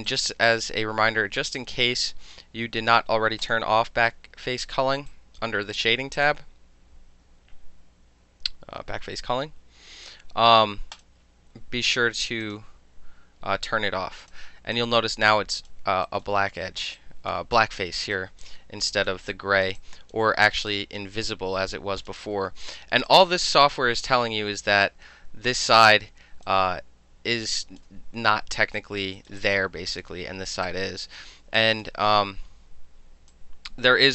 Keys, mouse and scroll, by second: 0.1 click, 0.5 click, 1.6 click, 2.4-3.5 middle drag, 3.5 click, 3.6-5.1 middle drag, 5.1 alt+click, 6.2 click, 11.0 click, 12.5 click, 13.2-14.3 middle drag, 14.3 click, 14.4-14.8 alt+middle drag, 14.8 alt+click, 15.7 alt+middle click, 16.1 alt+right click, 16.3-17.0 alt+middle drag, 17.0 alt+click, 17.4 alt+middle click, 17.6 alt+click, 17.8 alt+middle click, 18.0 alt+right click, 18.2 alt+middle click, 18.5 alt+click, 19.1 alt+middle click, 19.4 alt+click, 19.7 alt+middle click, 19.8 alt+click, 20.7 alt+click, 22.1 click, 22.7 alt+click, 23.1 click, 23.7 alt+click, 26.5-27.8 alt+drag, 28.8 alt+click, 29.2 alt+middle click, 29.2 alt+click, 29.3 alt+middle click, 29.4 alt+click, 30.1 alt+middle click, 30.7 alt+click, 31.1 alt+middle click, 31.6 alt+click, 31.9-33.2 alt+middle drag, 33.4-34.1 alt+drag.